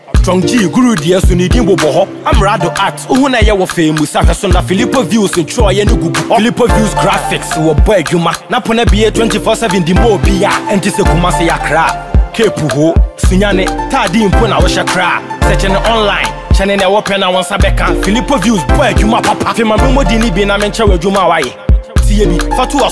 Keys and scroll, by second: 13.5 ctrl+=.